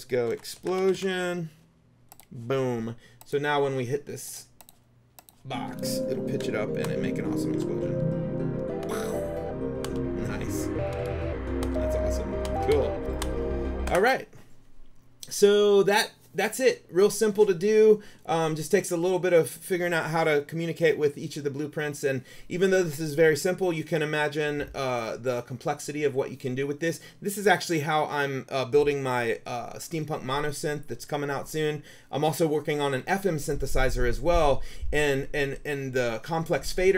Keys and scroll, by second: 0.1-1.7 typing, 6.6 Down, 7.1 Right, 8.1 Up, 9.4 Down, 10.1 Up, 11.2 Down, 11.9 Up, 12.9 Down, 14.0 Escape.